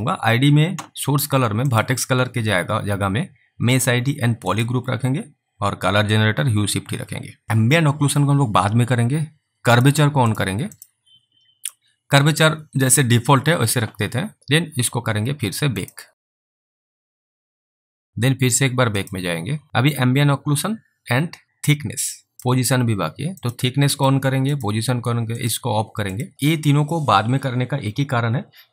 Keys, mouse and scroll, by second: 9.8 click, 10.8 double click, 14.4 click, 16.4 click, 18.1 click, 22.3 click, 23.4 click.